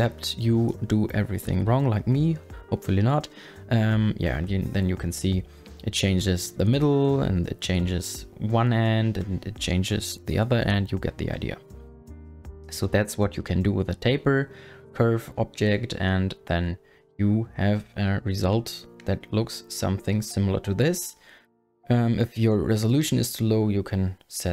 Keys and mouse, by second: 0.2 w, 0.8 ctrl+z, 1.2 ctrl+z, 2.1 Tab, 3.3 g, 4.8 click, 5.1 g, 5.4 click, 6.3 g, 7.3 click, 7.4 space, 8.1 space, 8.5 g, 9.7 click, 10.1 click, 10.4 g, 11.2 Tab, 12.3 click, 12.4 middle click, 12.8 middle click, 13.3 KP_1, 19.0-20.1 drag, 22.2 click.